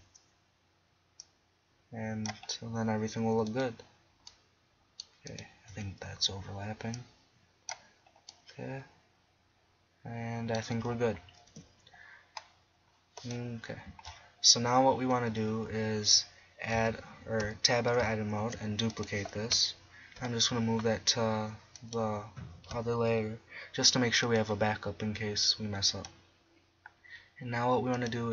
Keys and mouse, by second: 2.9 middle click, 3.5-5.1 middle drag, 5.7 KP_1, 10.3-10.8 middle drag, 11.5 KP_7, 12.5-12.8 middle drag, 12.9-13.2 middle drag, 13.7 middle drag, 16.8 a, 17.4 Tab, 18.4 shift+d, 20.2 m, 24.3-27.9 drag, 27.9-28.3 drag.